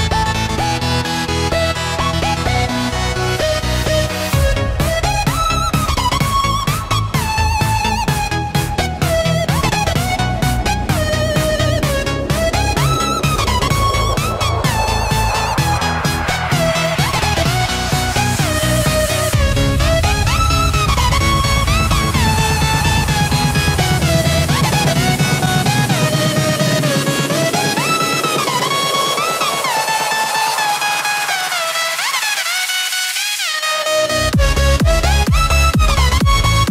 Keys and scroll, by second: 4.4 ctrl+t, 7.6 Escape, 8.7 ctrl+t, 10.3 Return, 15.4 Return, 23.8 ctrl+d.